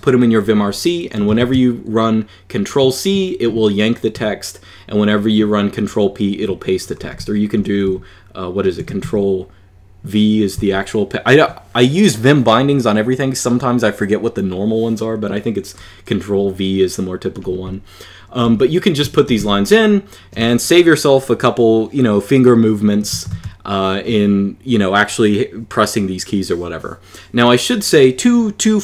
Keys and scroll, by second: 1.0 Escape, 1.3 Escape, 6.6-9.3 typing, 18.2 k, 18.9 shift+v, 19.2 j, 23.0 Escape, 23.2 Escape.